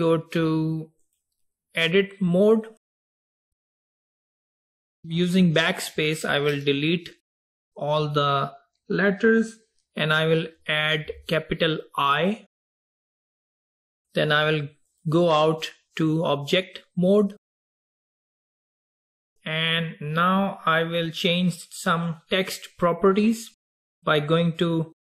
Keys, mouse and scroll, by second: 1.2-4.2 drag, 6.0 BackSpace, 6.3 BackSpace, 6.6 BackSpace, 7.4 BackSpace, 15.0-18.0 drag, 19.7-20.7 scroll up 4, 20.7-21.2 scroll down 1, 21.2-24.3 scroll down 1.